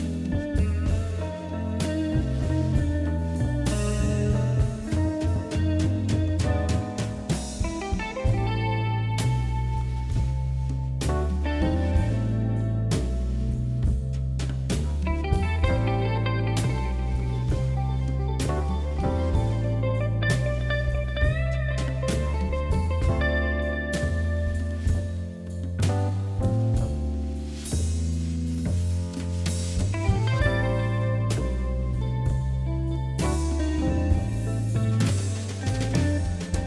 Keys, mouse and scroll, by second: 1.4 KP_3, 2.0 KP_1, 2.4 scroll up 2, 2.7-4.2 shift+middle drag, 4.7 s, 8.1 shift+z, 10.3 ctrl+r, 11.6 scroll up 3, 11.8 shift+middle click, 12.2 click, 12.5 middle click, 13.1 shift+z, 13.3 scroll down 3, 13.5-14.9 middle drag, 14.9 click, 15.2 g, 15.9-17.7 middle drag, 17.7 KP_1, 18.1-18.5 scroll up 1, 18.5 shift+z, 19.1 scroll down 1, 19.5 shift+click, 21.8 shift+click, 22.6 middle click, 23.4 shift+click, 23.7 scroll down 1, 23.7 middle click, 24.3 KP_3, 24.8 KP_1, 25.3 scroll up 2, 26.1 e, 29.9 g, 30.5 e, 31.4 s, 33.0 g, 34.7 g.